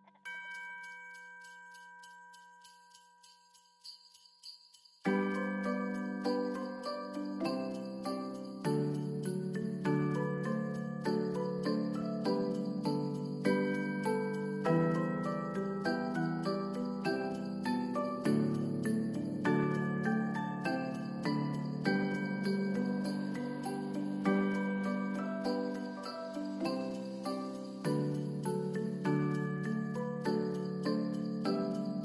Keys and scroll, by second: 5.4 u, 6.3 ctrl+s, 29.4 t.